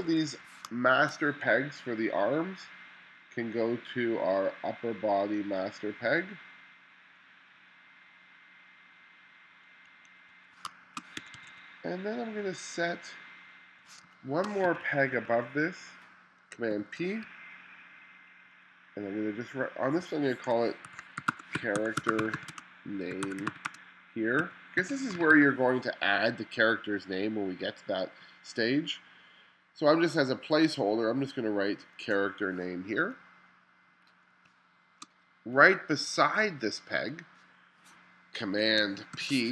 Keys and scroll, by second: 0.7 space, 10.2 2, 10.7 space, 11.2 2, 14.1 space, 14.7 2, 16.7 super+p, 20.6-25.8 typing, 34.5 space, 39.2 super+p.